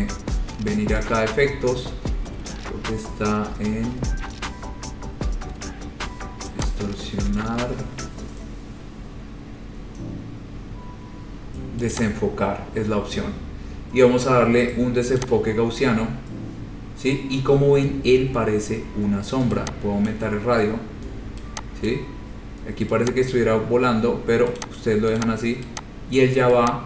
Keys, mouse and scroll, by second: 3.8 click, 6.8 click, 12.1 click, 15.4 click, 20.3 click, 22.1 click, 23.5 click, 24.8 click, 25.4 click, 26.3 click.